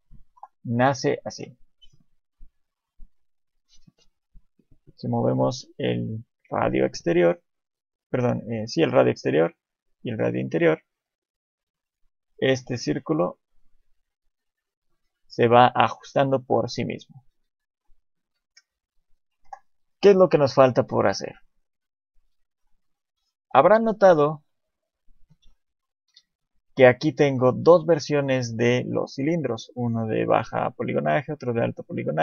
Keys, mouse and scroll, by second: 0.2 Delete, 0.9 KP_7, 1.3 shift+a, 3.7 middle click, 5.0 click, 9.7 click, 16.0 shift+middle click, 17.3 KP_7, 19.4 Delete, 22.6 KP_1, 24.3-25.0 scroll down 1, 25.0-25.4 scroll down 2, 25.4 1, 26.1 KP_7, 26.7-27.3 scroll down 2, 27.1 shift+middle click, 28.6 middle click, 29.2 scroll up 3, 29.8 click, 31.2 click.